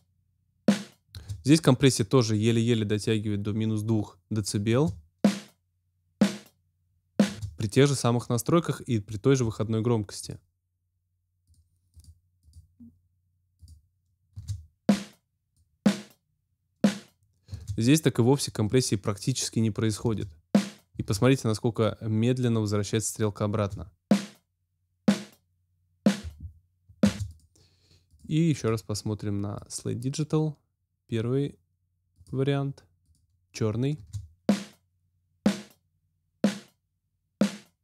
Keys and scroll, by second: 1.1 space, 4.7 space, 7.2 space, 14.3 space, 17.5 space, 19.9 space, 23.5 space, 27.0 space, 33.9 space.